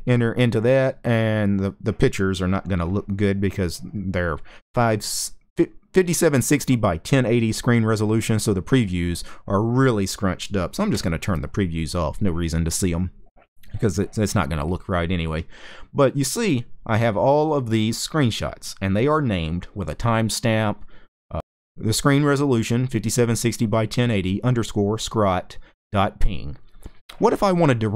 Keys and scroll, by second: 10.6 w.